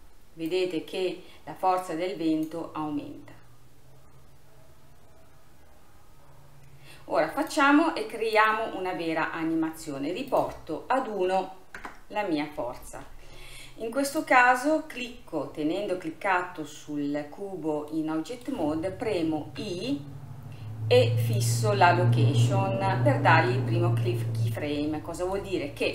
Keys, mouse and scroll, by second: 7.5-9.2 drag, 9.2-10.3 scroll down 3, 10.3-13.4 drag, 14.2 click, 14.7-18.0 scroll up 5, 18.0-19.6 middle drag, 24.5-24.9 scroll down 2, 24.9-25.4 scroll up 3, 25.4-25.9 middle drag.